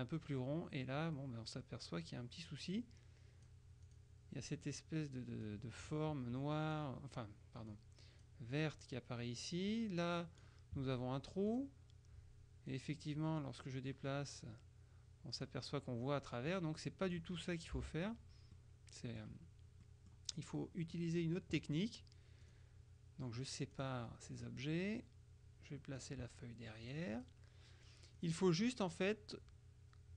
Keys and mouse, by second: 5.5-7.3 drag, 7.8 click, 9.8 click, 11.6 click, 12.8 click, 13.5-16.0 drag, 16.6-17.7 drag, 17.9 Delete, 18.6-19.7 drag, 19.9-21.5 drag, 22.6 click, 23.9-25.1 drag, 27.0-27.9 drag, 28.3 click.